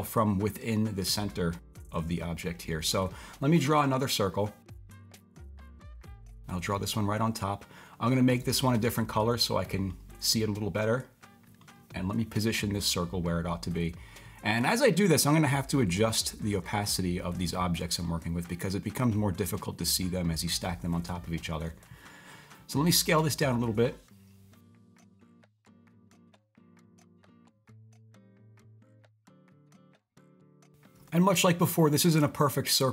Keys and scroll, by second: 25.9 s.